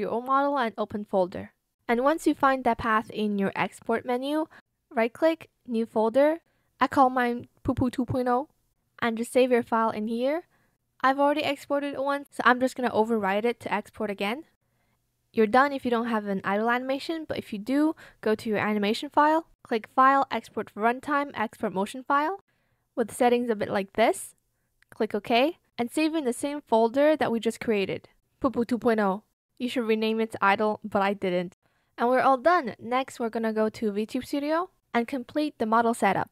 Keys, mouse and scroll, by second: 7.3-9.0 typing.